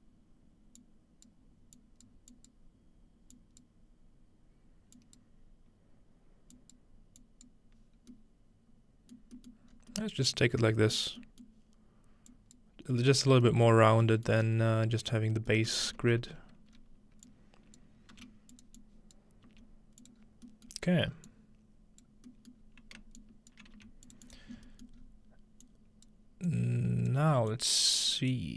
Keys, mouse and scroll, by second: 0.8 click, 1.8 click, 2.3 click, 3.4 click, 5.0 click, 6.6 click, 7.2 click, 9.2 middle drag, 9.7 middle click, 9.7-10.4 scroll up 1, 10.2-10.7 middle drag, 10.4-11.0 scroll down 1, 11.2 middle drag, 11.5-13.3 middle drag, 12.3 click, 13.8 middle click, 13.9 scroll down 1, 14.4-15.5 middle drag, 14.9 scroll down 1, 15.7 ctrl+middle click, 16.7 scroll down 1, 16.8 scroll up 1, 17.3-17.9 drag, 18.2 g, 18.5 click, 18.8-21.2 drag, 19.5 typing, 20.3-21.3 scroll down 1, 20.5 middle click, 21.3 click, 22.6-23.0 scroll down 1, 23.2 shift+click, 23.8-24.1 scroll down 1, 23.8 g, 24.6-27.1 scroll up 1, 26.1-28.5 drag.